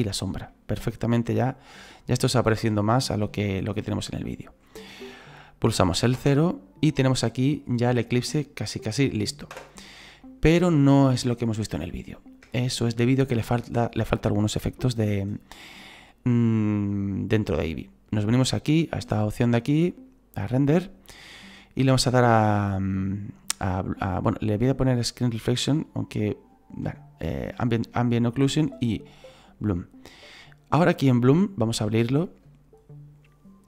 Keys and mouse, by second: 0.5 middle click, 2.1 middle click, 6.2 KP_0, 9.5 KP_0, 10.2 middle click, 11.5 middle click, 12.5 shift+middle click, 14.8 shift+middle click, 19.9 click, 25.3 click, 27.8 click, 29.8 middle click, 32.0 click.